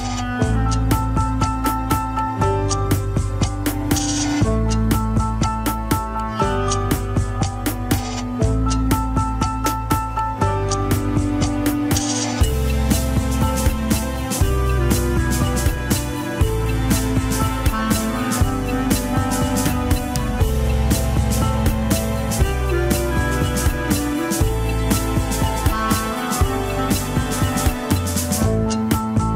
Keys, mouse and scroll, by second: 1.4-2.6 middle drag, 2.6 ctrl+click, 3.5 middle click, 3.9 scroll down 2, 4.6 ctrl+s, 4.8 ctrl+Tab, 5.4 scroll down 1, 5.9 click, 6.3 middle click, 7.2 KP_1, 7.4 scroll up 4, 8.2 ctrl+Tab, 8.5 a, 9.2 alt+g, 10.1 click, 10.8 g, 18.7-20.2 middle drag, 20.2 KP_1, 20.7 ctrl+Tab, 20.8 click, 21.5 Tab, 22.4 click, 23.1-23.5 scroll down 1, 23.5 shift+middle click, 24.0-24.5 scroll up 1, 25.0 shift+click, 25.2 shift+click, 26.8 click, 27.1 click, 28.6 shift+click.